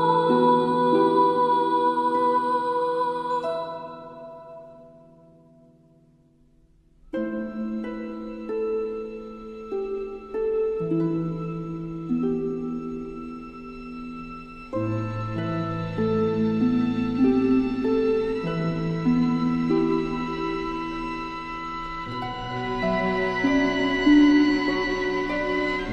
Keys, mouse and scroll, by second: 2.7 ctrl+click, 2.8 shift+m, 4.0-5.0 drag, 7.9 alt+scroll down 1, 8.5 space, 8.6 click, 9.1-9.7 scroll down 2, 9.8 alt+scroll down 2, 10.1 space, 10.2 click.